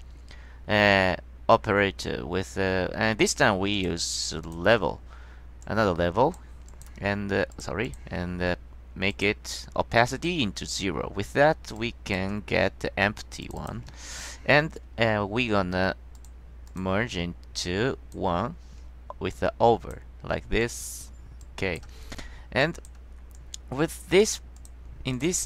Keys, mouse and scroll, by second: 3.9 click, 4.6 click, 5.7-6.5 drag, 6.8 click, 7.6 click, 8.0 click, 9.2 click, 10.4-10.9 drag, 11.9-12.3 drag, 13.6 click, 16.3 click, 16.8 click, 17.7-18.3 drag, 19.5-20.1 drag, 20.7-21.2 drag, 21.5-21.9 drag, 22.7 click, 23.5-24.1 drag, 24.7 click, 25.3 click.